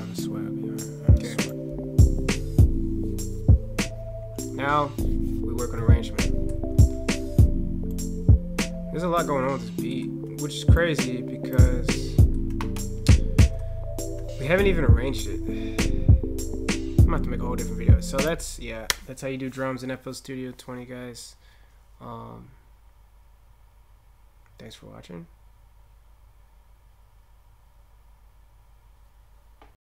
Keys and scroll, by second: 6.1 ctrl+F8, 10.1 ctrl+BackSpace, 10.4 ctrl+F8, 12.4 ctrl+?, 13.8 ctrl+F8.